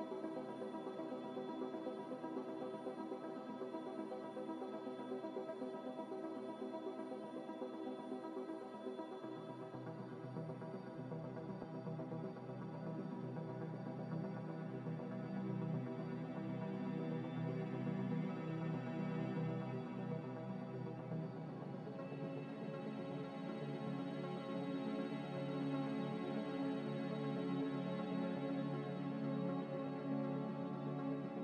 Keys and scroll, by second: 22.2-23.1 typing, 24.8-25.5 typing.